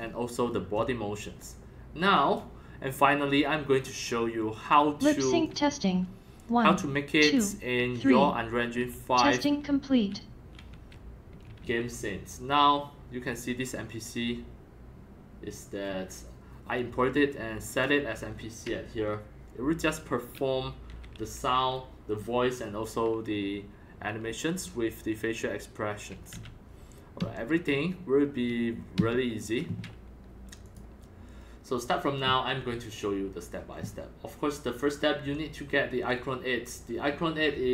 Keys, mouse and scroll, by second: 0.2 scroll, 0.4 scroll up 3, 0.9-1.7 middle drag, 2.1 click, 3.7 scroll down 2, 4.5 click, 5.2 click, 5.4-12.1 typing, 13.3 typing, 20.9 s, 26.3 s, 27.1 F1, 28.9 Escape, 30.6-31.7 drag, 31.7 scroll down 1, 32.2 click, 32.5 scroll down 1, 32.7 click, 33.1-33.5 scroll.